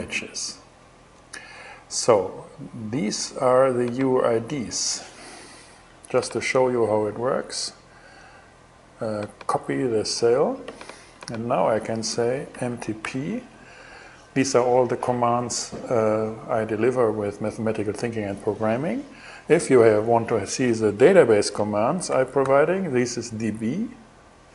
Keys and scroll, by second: 11.9-13.1 typing, 21.7 shift+d, 22.0 shift+b.